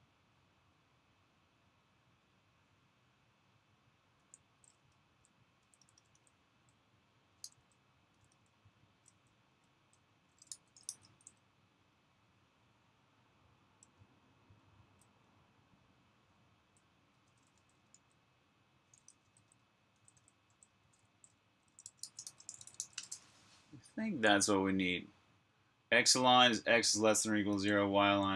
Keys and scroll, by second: 3.8-10.8 typing, 16.0-22.7 typing, 24.8 typing, 27.4 j.